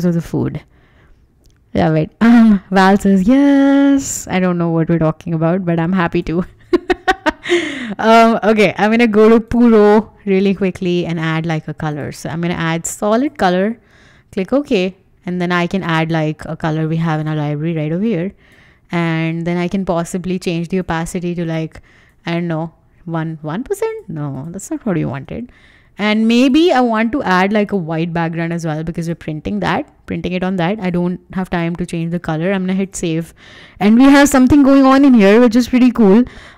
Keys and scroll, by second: 25.0 Return, 32.0 super+s.